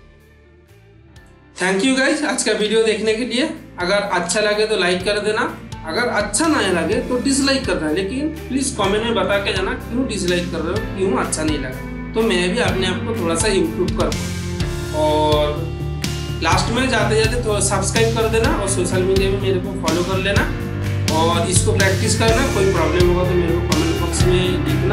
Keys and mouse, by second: 1.1-2.3 middle drag, 3.2-4.2 middle drag, 11.8-14.5 middle drag.